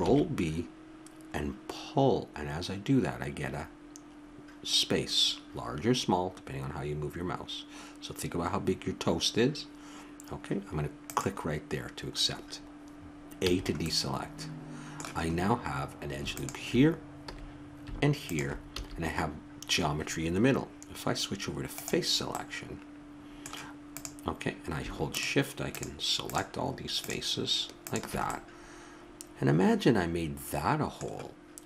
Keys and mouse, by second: 0.0 ctrl+b, 13.4 a, 15.5 middle click, 16.3 click, 17.3 a, 18.8 a, 22.9 click, 24.1-29.9 middle drag.